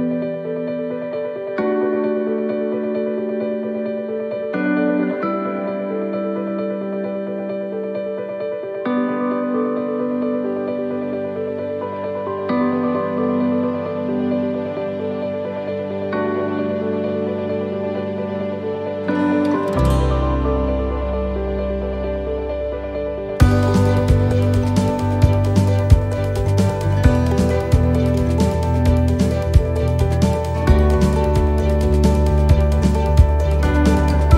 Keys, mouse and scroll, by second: 0.7 middle click, 2.3 click, 3.2 right click, 4.5 l, 8.1 middle click, 8.1 r, 9.6 click, 11.6 middle click, 13.0 click, 14.7 click, 19.3 click, 19.3 middle click, 19.7-20.2 scroll up 4, 20.2 middle click, 20.7 shift+middle click, 21.0 middle click, 22.2 click, 25.5 middle click, 26.0 middle click, 27.0 click, 28.4 middle click, 29.3 shift+middle click, 30.2 right click, 33.9 l.